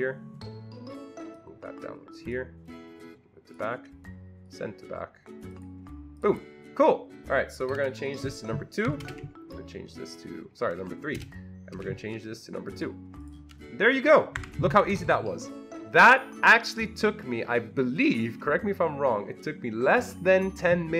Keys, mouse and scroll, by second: 4.4 right click, 6.2 click, 7.7 click, 9.0 BackSpace, 9.1 2, 11.2 BackSpace, 11.8 3, 12.7 click, 13.2 click, 14.4 Delete, 14.4 2, 14.7 Escape, 14.9 Escape, 15.0 Escape.